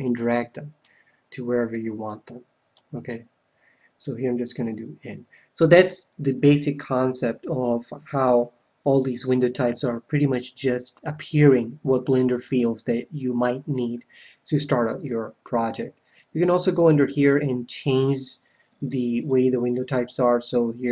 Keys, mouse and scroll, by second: 1.6-3.4 drag, 4.5 n, 16.4-18.2 drag.